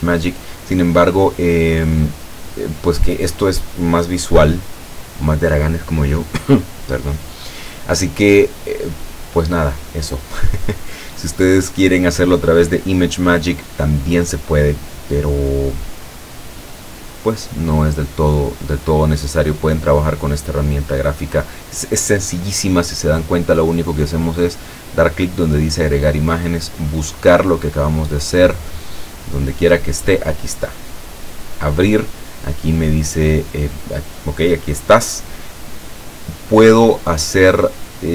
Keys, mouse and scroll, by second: 2.1-3.4 drag, 20.3-21.7 drag, 24.5 click, 26.5 click, 28.8-29.2 scroll down 2, 30.3 click, 31.4 click, 32.9-33.9 drag, 37.1-38.1 drag.